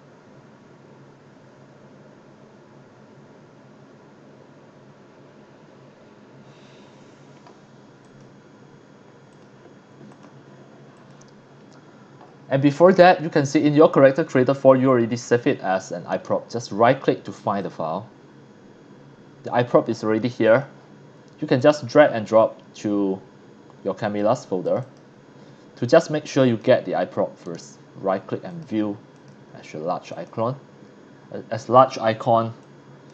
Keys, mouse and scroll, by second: 8.0 click, 9.3 click, 10.1 click, 10.9 click, 16.1 right click, 17.6 click, 20.4 click, 21.5-24.1 drag, 24.6 click, 24.8 click, 26.4 click, 27.4 right click, 28.5 click, 29.1 click, 30.1 click, 32.6 click, 32.8 click.